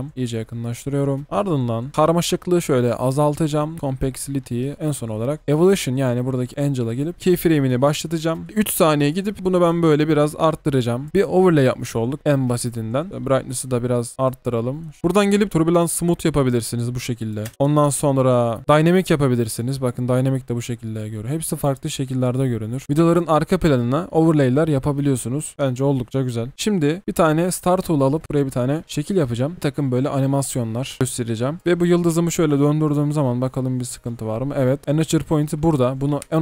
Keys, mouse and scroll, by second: 7.1-7.9 alt+scroll up 1, 8.4-9.9 alt+scroll up 1, 11.1 space, 22.1 double click, 31.0 v, 32.1 typing.